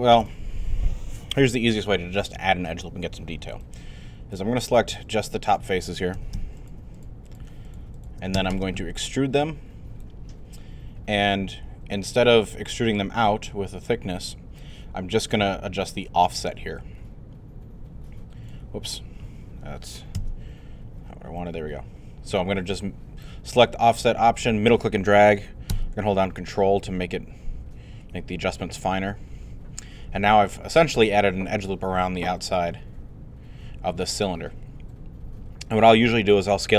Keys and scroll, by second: 6.1 shift+q, 20.2 z.